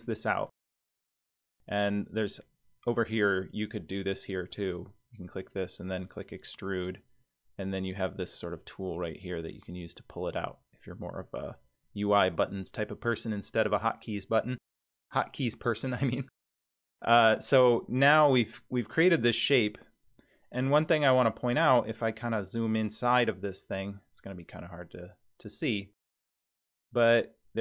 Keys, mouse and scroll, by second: 4.5 click, 6.0 click, 8.3-10.5 drag, 15.7 click, 17.1-19.2 middle drag, 21.4-22.9 scroll up 12, 23.1-27.6 middle drag.